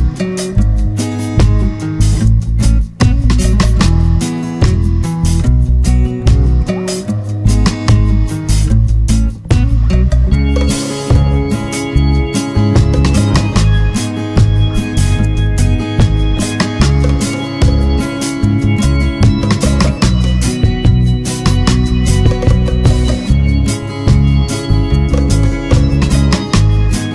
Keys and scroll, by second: 11.6 ctrl+-, 12.4 ctrl+=.